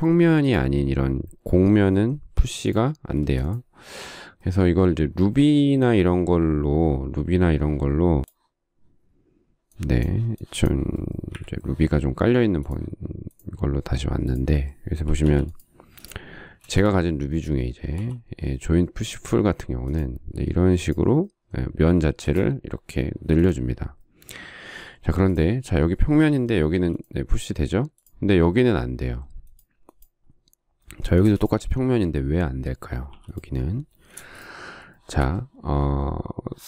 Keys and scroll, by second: 2.3 p, 3.1 space, 11.5 Delete, 15.5 p, 16.9 space, 18.3 j, 22.5 space, 27.0 p, 31.4 space, 33.3 p, 34.4 space.